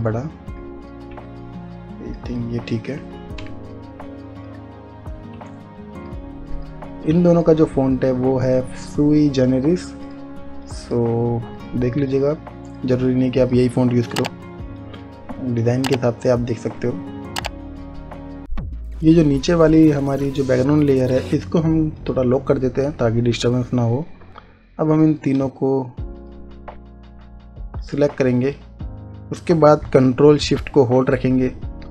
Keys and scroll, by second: 5.8 Return, 14.6 Return.